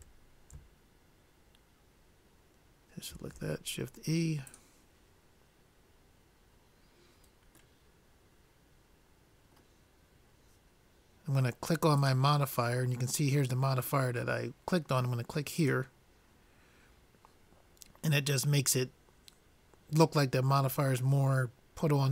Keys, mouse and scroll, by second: 3.4 shift+e, 8.3-9.9 middle drag, 12.4-13.9 drag, 15.8 click, 16.8 click.